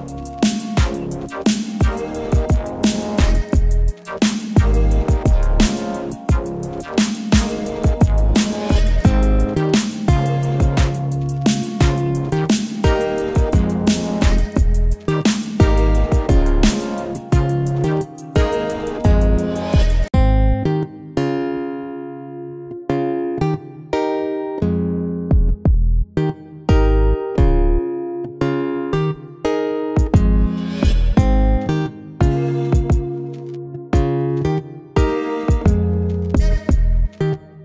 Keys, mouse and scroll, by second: 3.3 click, 4.4 0, 6.4 0, 7.8 typing, 9.6-11.8 drag, 14.7-22.8 drag, 25.0 click, 25.7 click, 30.7 click, 31.6-33.4 typing, 34.2 click.